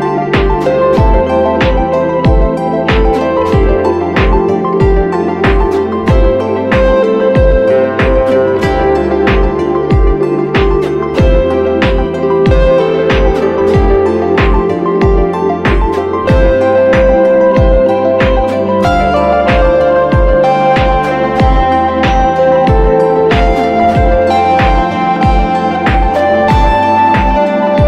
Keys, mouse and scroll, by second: 13.9-14.4 typing, 21.5-22.6 scroll up 1, 22.6 typing, 26.3-27.5 typing.